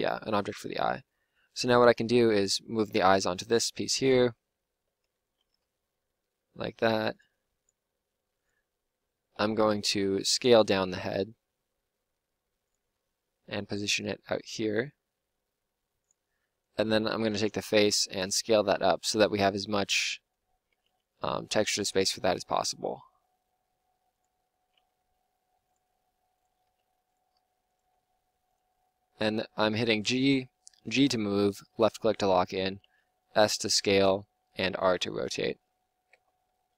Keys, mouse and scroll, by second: 1.5 middle click, 3.9-8.3 drag, 5.0 l, 5.6 g, 9.3 ;, 9.6 l, 10.3 s, 12.9 g, 16.0-18.5 drag, 17.4 l, 18.1 s, 20.7 s, 21.9 g, 24.7 s, 25.8-28.6 typing, 29.8 g, 32.8 s, 34.5 r, 36.1 Tab.